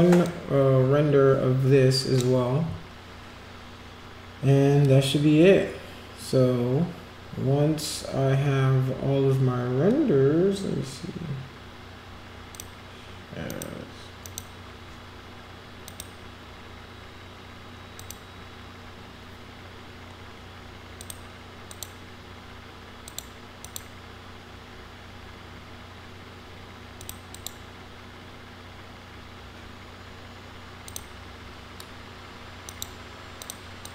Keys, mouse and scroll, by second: 0.2-2.2 drag, 12.5 click, 13.5 click, 14.2 click, 15.8 click, 18.0 click, 21.0 click, 21.7 click, 23.0 click, 23.6 click, 27.0 click, 27.3 click, 30.9 click, 32.7 click, 33.4 click, 33.8 click.